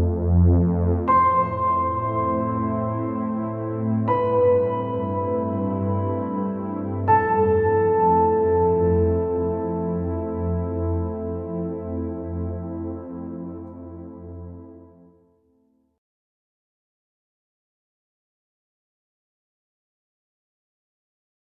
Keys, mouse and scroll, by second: 0.5 space, 4.0 click, 4.2 middle click, 4.7 middle click, 6.1 click, 6.7-8.0 drag, 9.5 click, 11.0 b, 12.4 g, 13.9-16.6 drag, 18.4 alt+a, 18.6 click, 19.0 shift+click, 19.3 click, 21.0 middle click.